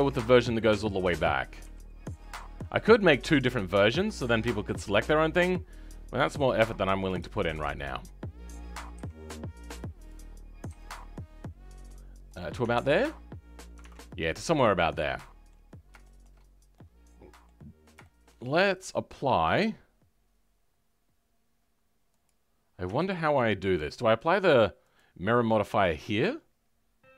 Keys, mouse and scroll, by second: 0.0-1.5 scroll down 7, 1.5 KP_3, 2.0-3.6 scroll up 11, 3.6-4.6 shift+middle drag, 4.6 e, 7.2 shift+middle click, 7.9-8.4 scroll up 2, 8.9 r, 14.1 scroll down 2, 14.4-15.6 middle drag, 15.6 scroll down 2, 15.9 shift+middle click, 16.3 scroll up 2, 16.6 middle click, 17.6-17.9 scroll up 2, 17.9-22.2 shift+middle drag, 22.2 click, 23.3 click.